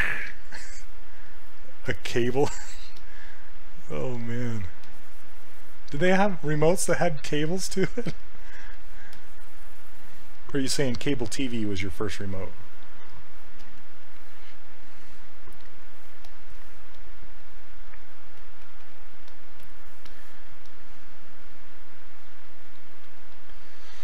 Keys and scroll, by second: 0.2 s, 13.6 s, 16.3 s.